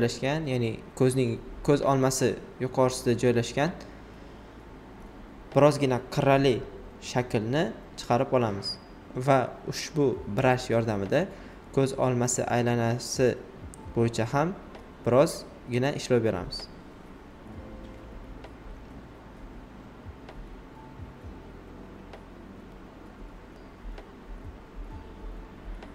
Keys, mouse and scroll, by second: 1.9 typing, 2.9 right click, 4.8-7.2 shift+drag, 7.2 alt+right click, 7.6-9.4 alt+right drag, 12.0 click, 15.9 right click, 16.2 typing, 16.4 alt+right click, 18.5 click, 20.4 right click, 20.9 alt+right click, 21.6 space, 21.8 click, 22.2 space, 22.4 right click, 24.0-24.8 typing, 24.4 click, 24.8 alt+right click, 25.5 click.